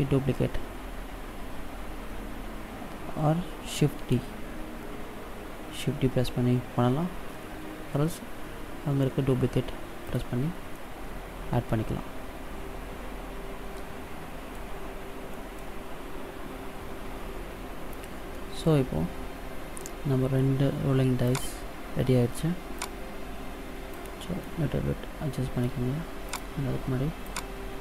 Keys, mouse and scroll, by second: 3.9 shift+d, 10.7 middle click, 14.8-15.1 scroll down 2, 15.2 middle click, 18.2 middle click, 21.2 right click, 21.4 right click, 22.6 click, 24.3 middle click, 26.2 right click, 27.1 click.